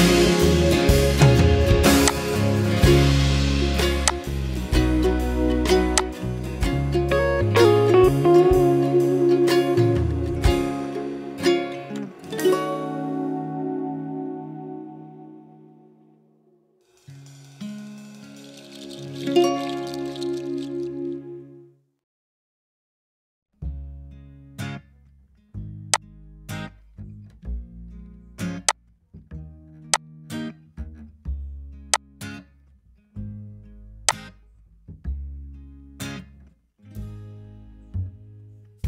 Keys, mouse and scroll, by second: 9.6 2, 12.7 2, 13.8 space, 16.2 -, 17.1 space, 22.2 typing, 23.5-24.2 typing.